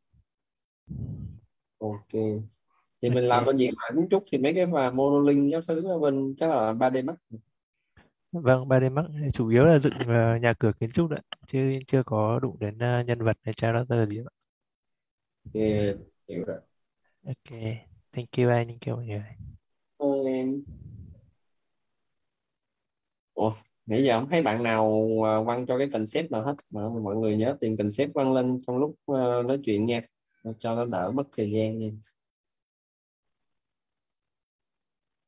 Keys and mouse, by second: 18.7-20.9 typing, 23.0 click, 26.4 click, 30.5 click, 33.2 click.